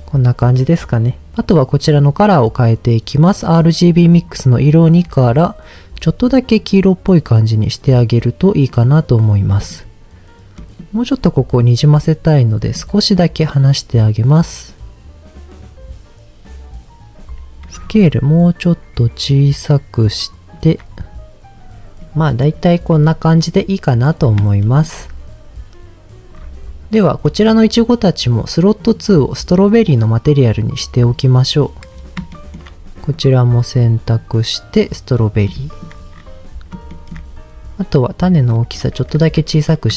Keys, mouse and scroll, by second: 4.1 click, 9.5 click, 10.5 middle click, 12.3 click, 13.1 click, 17.9-20.5 shift+drag, 22.0 middle click, 24.3 scroll down 3, 24.6 shift+middle click, 26.3-26.9 scroll up 2, 26.9 click, 27.2 shift+middle click, 28.8 click, 30.2 click, 31.9 scroll down 2, 32.3 shift+middle drag, 33.1 click, 34.1 click, 35.5 shift+middle click, 36.1-36.7 scroll up 2, 36.9 shift+middle click, 37.1-38.1 shift+scroll up 3, 38.3 click, 39.3 Tab, 39.9 a.